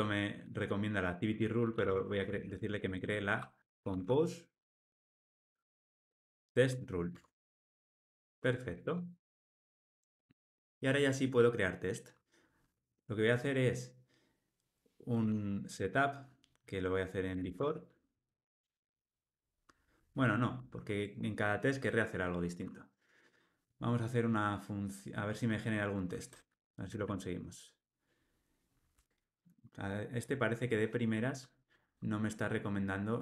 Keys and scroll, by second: 5.1 Escape, 7.1 Tab, 8.7 Tab, 18.4 Return, 20.5 super+z.